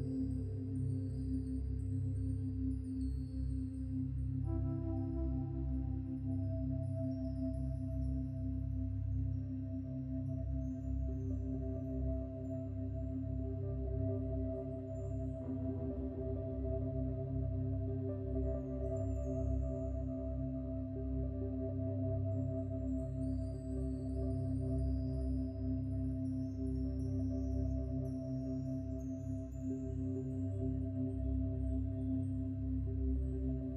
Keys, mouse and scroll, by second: 3.3-5.1 drag, 7.0-8.6 shift+drag, 27.8 scroll up 5.